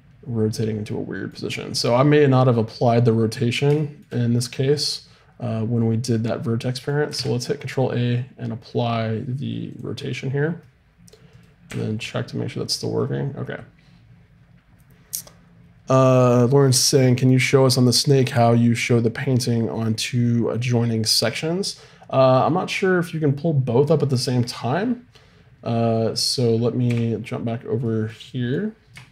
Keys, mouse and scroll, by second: 4.4-7.1 middle drag, 7.1 ctrl+a, 10.7 middle click, 11.3-13.0 right drag, 11.7 r, 26.9 3.